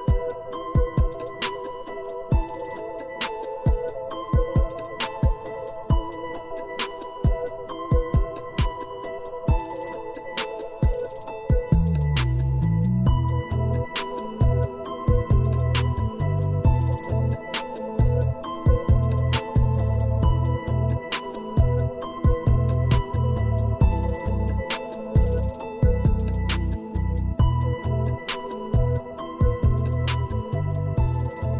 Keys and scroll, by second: 18.3 typing.